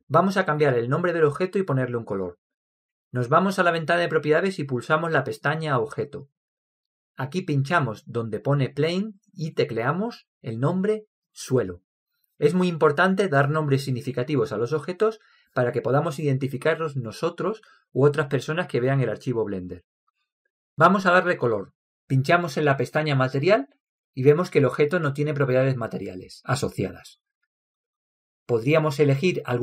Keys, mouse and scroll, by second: 7.4-11.2 drag, 25.0-26.9 drag.